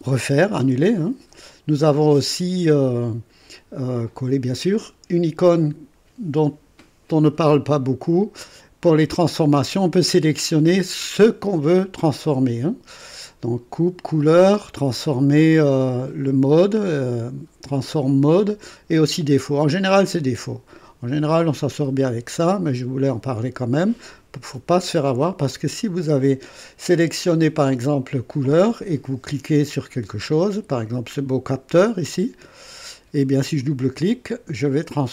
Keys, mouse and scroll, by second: 5.5 click, 22.4 click, 25.5 click, 27.1 click, 28.4 click, 32.4 click, 33.6 click.